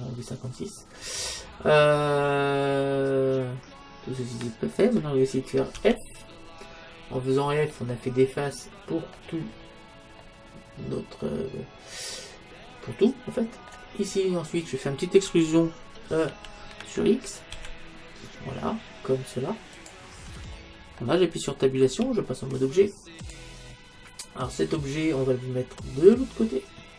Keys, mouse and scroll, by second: 1.0-5.8 middle drag, 5.8 f, 7.1 middle click, 9.0-12.2 middle drag, 14.1-16.1 middle drag, 16.3 e, 19.8 e, 20.4-23.4 middle drag, 21.9 Tab, 25.8-26.9 drag.